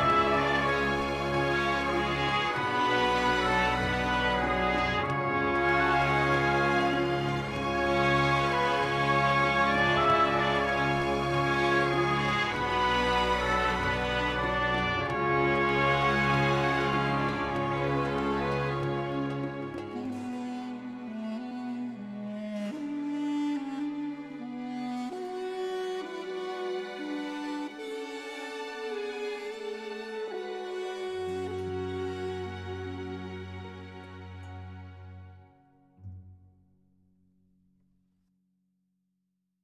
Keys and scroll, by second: 0.1 7, 0.5 Return, 35.9 Tab, 37.9 alt+a.